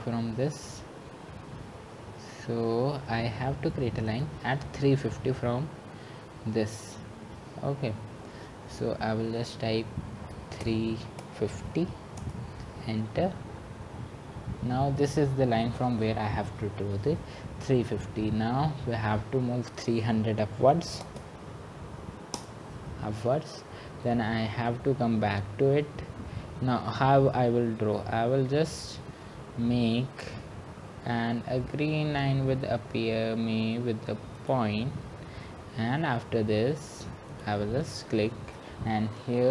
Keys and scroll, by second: 12.4-13.1 typing, 21.2 Return, 22.6-23.3 typing.